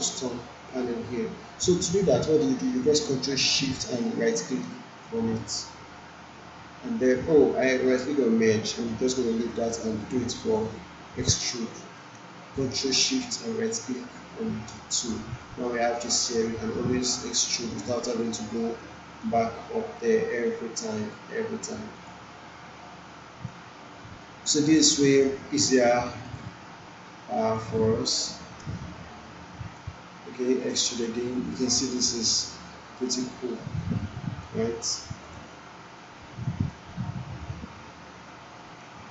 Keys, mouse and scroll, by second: 3.1 ctrl+Num_Lock, 3.1 click, 4.5 ctrl+shift+right click, 11.2 ctrl+shift+right click, 12.1 ctrl+shift+right click, 14.9-30.9 drag, 19.5-21.4 drag, 31.3-34.6 drag.